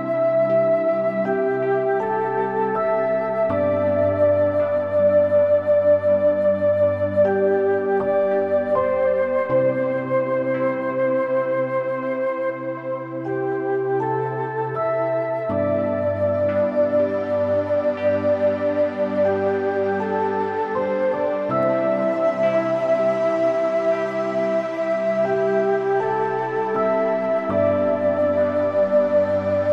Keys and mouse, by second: 0.2 shift+click, 0.7 g, 1.1 z, 2.9 middle click, 3.4 click, 3.6 middle click, 4.2 click, 4.8 middle click, 5.4 middle click, 6.0 shift+click, 6.8 g, 7.1 z, 8.0 click, 8.4 Tab, 8.7 middle click, 10.1 click, 10.5 middle click, 12.0 Tab, 12.4 click, 12.9 shift+click, 13.3 shift+click, 13.7 shift+click, 14.1 shift+click, 15.6 g, 16.5 Escape, 17.1 click, 18.0 shift+click, 18.5 shift+click, 19.0 shift+click, 19.4 g, 19.8 z, 23.8 click, 24.0 middle click, 24.9 g, 25.5 z, 28.6-29.7 middle drag.